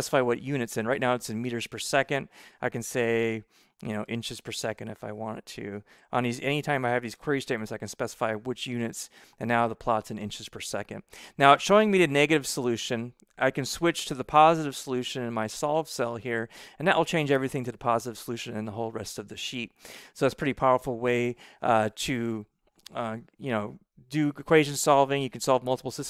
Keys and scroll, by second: 2.9-6.0 typing, 5.6 Right, 7.0 BackSpace.